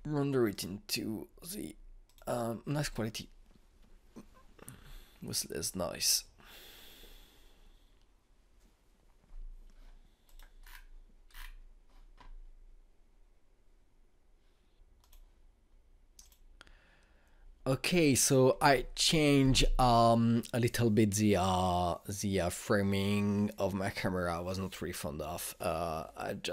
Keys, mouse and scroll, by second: 10.9 click, 11.3-13.8 scroll down 1, 15.8 click, 17.0 click.